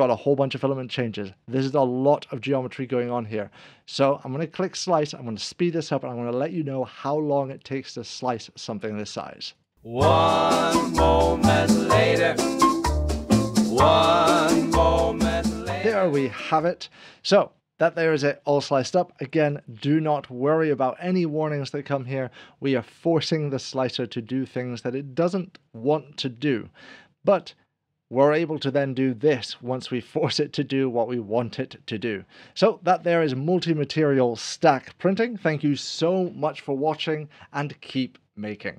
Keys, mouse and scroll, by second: 9.6 click, 22.1 scroll up 1, 23.8 click, 33.5 scroll down 1.